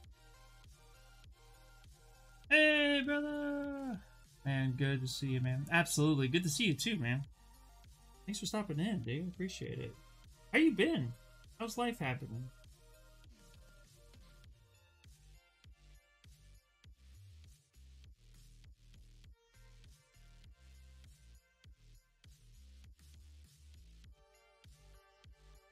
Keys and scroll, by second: 13.8 ctrl+z.